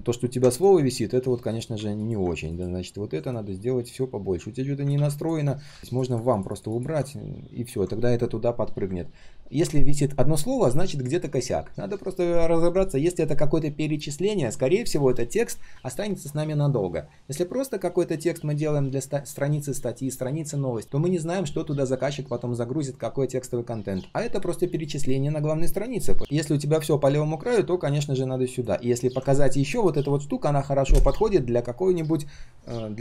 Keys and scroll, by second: 4.9 ctrl+z.